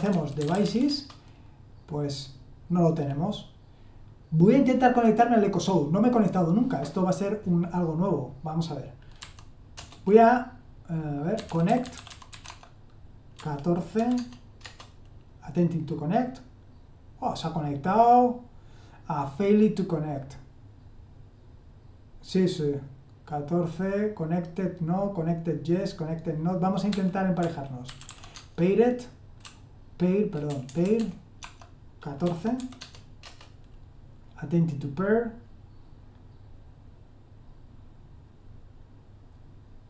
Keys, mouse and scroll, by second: 0.0-1.1 typing, 9.1 typing, 11.1-13.9 typing, 14.1 Tab, 14.6 Return, 26.6-33.5 typing.